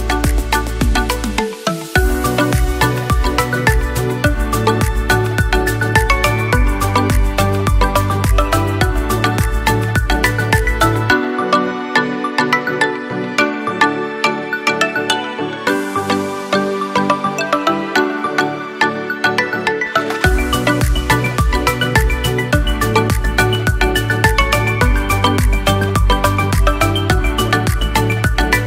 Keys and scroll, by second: 15.6 ctrl+0, 17.0 ctrl+=, 21.8 Delete.